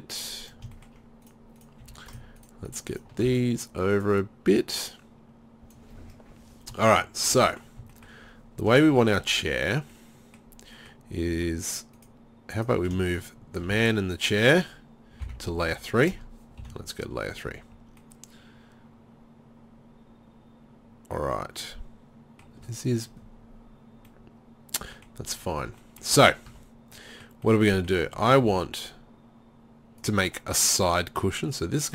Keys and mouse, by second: 1.3 click, 1.8 z, 3.3 z, 11.4 Tab, 13.7 z, 15.3 m, 16.6 3, 17.5 z, 20.3-24.6 middle drag, 25.6 Tab, 26.2-26.5 right drag, 26.5 Tab, 28.5 ctrl+r, 30.1 click.